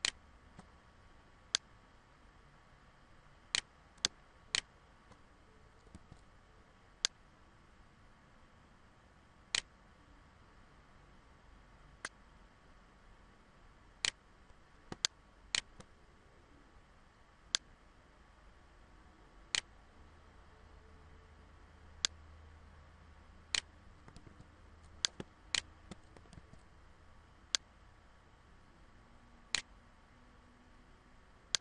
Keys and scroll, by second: 5.1 ctrl+z, 23.8 ctrl+z, 25.2 ctrl+z.